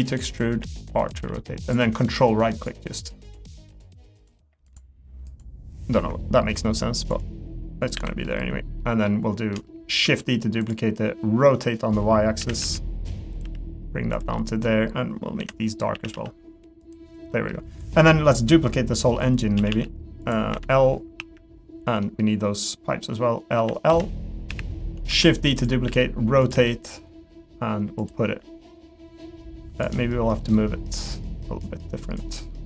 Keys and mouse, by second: 0.0-1.2 typing, 3.7-6.1 ctrl+right drag, 6.2 middle click, 8.2 middle click, 9.0 middle click, 9.6 shift+middle click, 10.0 shift+d, 12.4 r, 13.4 g, 14.3 middle click, 15.4 l, 15.9 a, 16.1 g, 17.3 middle click, 18.9 middle click, 19.6 a, 20.5 l, 21.2 KP_1, 22.0 middle click, 23.5-26.5 typing, 28.4 r, 29.9 middle click, 31.0-32.2 drag, 32.3 middle click.